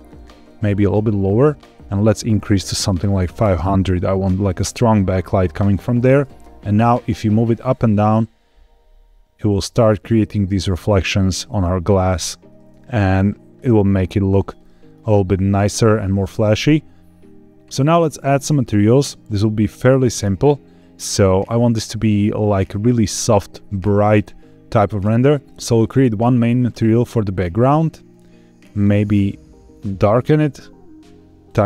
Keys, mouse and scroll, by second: 0.1 g, 0.2 z, 1.1 click, 1.8-3.4 drag, 3.1 KP_0, 5.9 g, 6.2 z, 10.8 click, 13.7-14.4 scroll up 2, 14.5 shift+middle click, 17.9-18.8 scroll up 2, 18.9 shift+middle click, 25.4 ctrl+z, 25.7 click, 26.6 click, 28.0 click.